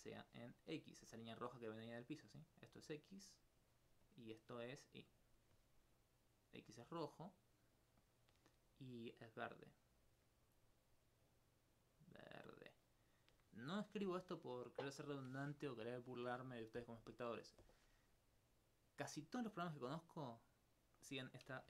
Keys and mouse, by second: 0.7 alt+d, 1.1 click, 1.6 click, 2.5 click, 2.8 click, 3.7 click, 4.1 click, 4.8 click, 6.4 click, 6.5 click, 6.9 click, 7.3 click, 7.7 click, 8.0 click, 9.1 click, 9.5 click, 10.5 click, 12.5 click.